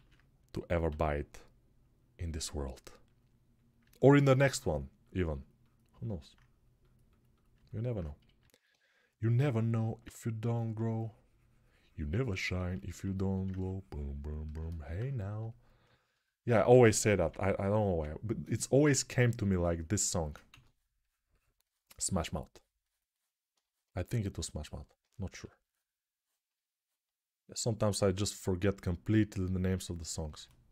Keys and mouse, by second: 0.6 g, 1.2-30.7 drag, 20.3 2, 25.0 1.